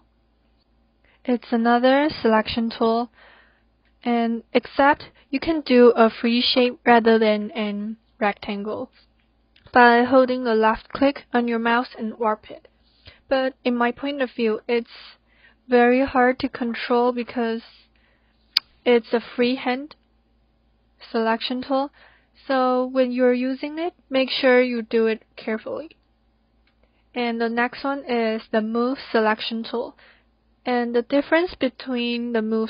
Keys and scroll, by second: 6.5 ctrl+d.